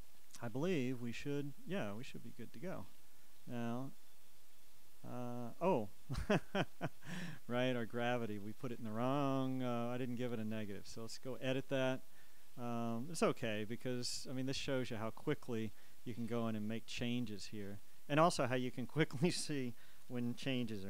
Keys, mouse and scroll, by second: 2.1 click, 3.4 click, 8.7 click, 11.0 click, 12.2 click, 13.2 click, 14.3 click, 15.8 click, 17.1 shift+click, 18.8 click, 20.1 Left.